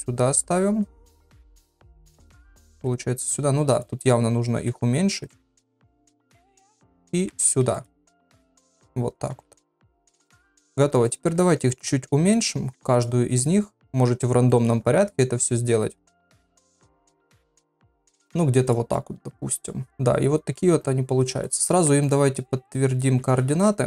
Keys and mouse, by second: 1.4 shift+middle click, 2.0 shift+d, 2.7 r, 4.5 s, 5.4 g, 7.2 s, 7.9 g, 9.3 r, 10.1 click, 10.5 s, 11.3 g, 12.3 click, 12.6 s, 13.4 click, 13.7 s, 14.5 shift+middle click, 15.0 click, 16.0 g, 16.8 click, 17.0 shift+middle click, 17.4 s, 18.9-20.6 middle drag, 21.5 click, 21.7 ctrl+a, 23.3 ctrl+a.